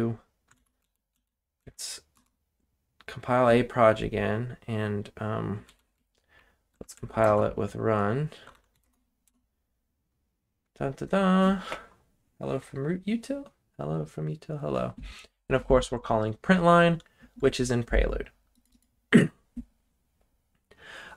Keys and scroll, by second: 0.5 ctrl+l, 0.8 Up, 1.1 Up, 1.6 Down, 2.1 Return, 5.6 Up, 5.9 Left, 6.2 Left, 6.2 Left, 6.3 Left, 6.7-9.2 typing, 9.2 Return, 11.0-11.7 typing.